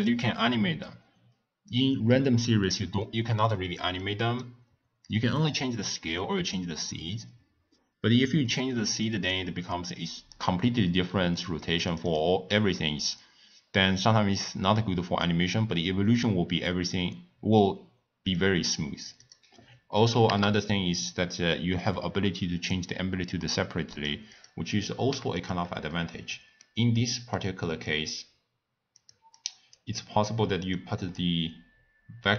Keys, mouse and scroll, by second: 1.7 click, 4.0-7.0 middle drag, 8.9-15.1 drag, 15.2 click, 16.0-19.0 drag, 19.2-25.5 drag, 25.9-27.8 middle drag, 27.8 click, 29.0 click, 29.3 click, 29.9 middle click, 30.7 click.